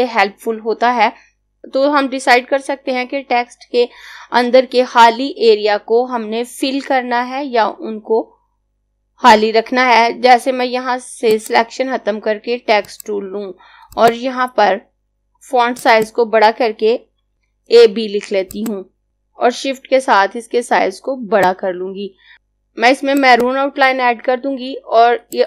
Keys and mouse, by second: 11.2 click, 17.1-17.8 typing, 18.5 click, 23.2 click.